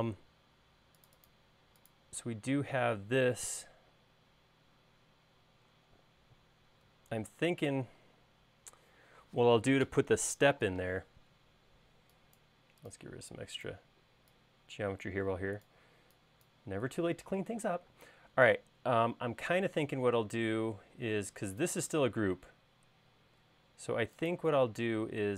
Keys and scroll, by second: 11.9 e, 18.6 space, 20.6 l, 21.8 space, 23.7 l.